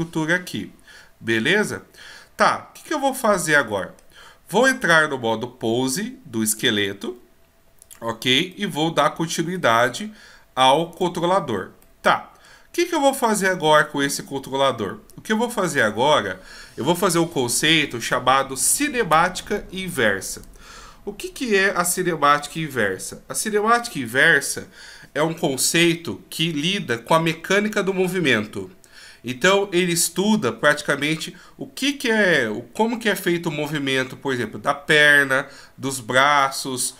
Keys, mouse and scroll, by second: 3.2 middle click, 4.8 right click, 6.4 click, 7.9 click, 8.5 middle click, 9.8 scroll up 2, 10.9 right click, 10.9-11.7 scroll up 1, 11.8 middle click.